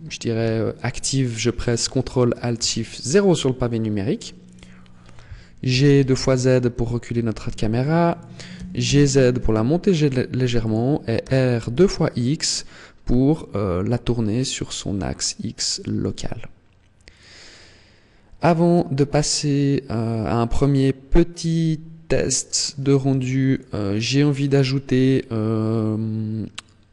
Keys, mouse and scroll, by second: 0.3 KP_1, 2.4 ctrl+alt+KP_0, 4.3 right click, 5.5 g, 8.0 click, 8.4 g, 10.6 click, 11.0 r, 18.3 click, 19.2 middle click, 22.9 ctrl+s, 23.7-24.5 scroll down 9, 24.4 scroll up 2, 24.5 scroll down 1.